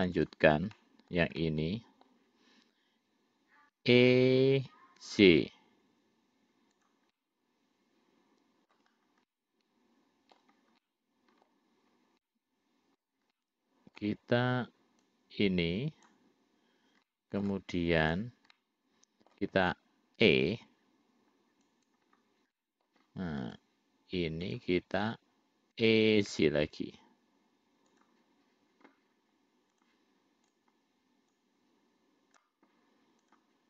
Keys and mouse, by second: 0.5 click, 1.0 middle click, 1.7 middle click, 4.0 e, 7.4-9.0 middle drag, 9.6-10.7 middle drag, 11.1 middle click, 12.5 middle click, 13.6 middle click, 15.3-16.4 drag, 17.3 middle click, 18.2 click, 18.8 middle click, 20.5 e, 22.9 middle click, 23.7 click, 24.8 shift+click, 26.1 e, 30.0 click, 30.7 click, 31.6-32.8 drag, 33.5 click.